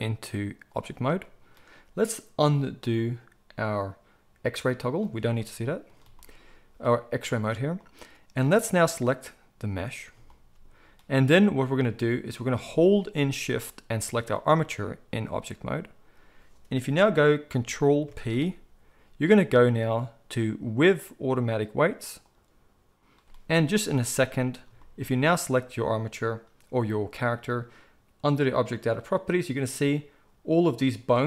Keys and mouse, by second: 8.9-13.9 middle drag, 13.9 shift+click, 14.1-25.3 shift+middle drag, 18.0 ctrl+p, 25.3 click, 25.4-30.4 middle drag, 30.4-31.2 drag.